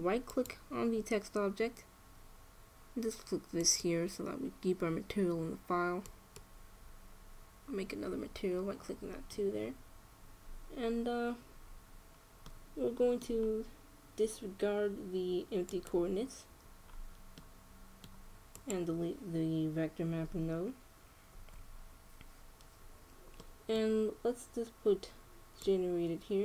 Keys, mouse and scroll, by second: 1.0-2.8 right drag, 4.3-6.1 drag, 6.7-8.5 drag, 12.4-15.9 middle drag, 16.4-18.3 drag, 18.3-19.8 middle drag, 19.3-21.0 drag, 22.5 x, 24.1-25.9 middle drag, 26.3-26.4 drag.